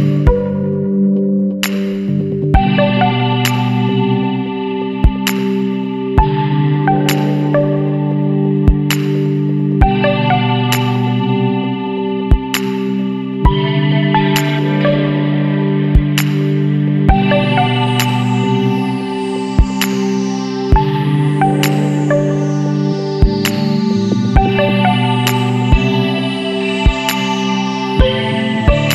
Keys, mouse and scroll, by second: 0.9 scroll up 1, 1.5 Up, 2.0 Down, 3.2-3.6 scroll up 1, 6.1 click, 8.7 click, 11.4 click, 12.4 click, 13.8 click, 14.9 click, 16.0 KP_4, 16.5 KP_Enter, 17.6 scroll up 1, 18.4 Down, 19.0 scroll up 1, 20.6 click, 21.8 click, 23.2 click, 23.9 click, 25.2 click, 26.9 click, 28.0 KP_3, 28.3 KP_0, 28.7 KP_Enter.